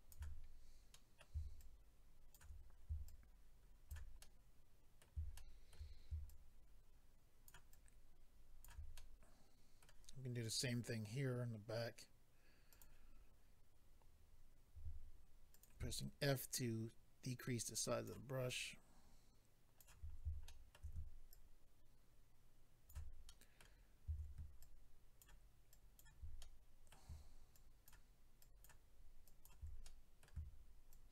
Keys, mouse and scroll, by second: 0.9 middle click, 1.6 shift+click, 3.0 shift+click, 4.2 middle click, 5.3 shift+middle click, 6.3 shift+click, 7.7 shift+click, 8.9 middle click, 10.4 click, 10.5 click, 12.7 click, 12.8 click, 13.1-14.0 scroll up 2, 15.5 click, 15.5 f, 16.2 ctrl+click, 18.4 ctrl+click, 20.1-20.4 scroll down 1, 20.4 shift+middle click, 21.3 ctrl+click, 23.2 middle click, 23.8-24.1 scroll up 1, 24.3 scroll up 1, 24.6 ctrl+click, 25.7 ctrl+click, 26.4 middle click, 27.5 ctrl+click, 28.4 ctrl+click, 29.3 ctrl+click, 29.9 middle click, 30.9 ctrl+click.